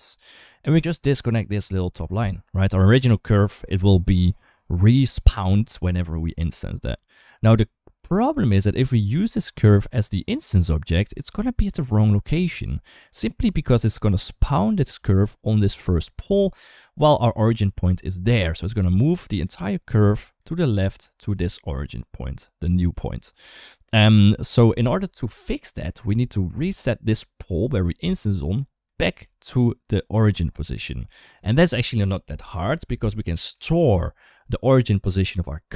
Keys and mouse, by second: 0.6 middle drag, 1.4 ctrl+right click, 4.4 middle click, 9.0-10.3 drag, 11.8 middle click, 12.9 shift+middle drag, 13.7 middle drag, 16.1-16.5 shift+middle drag, 16.7 shift+middle drag, 18.8-19.2 shift+middle drag, 19.9 shift+middle drag, 20.3-20.7 shift+middle drag, 21.1 d, 21.4 click, 22.7 d, 26.1 shift+middle drag, 27.9-28.3 shift+middle drag, 28.7 shift+middle drag, 30.5 shift+middle drag, 33.4 shift+middle click.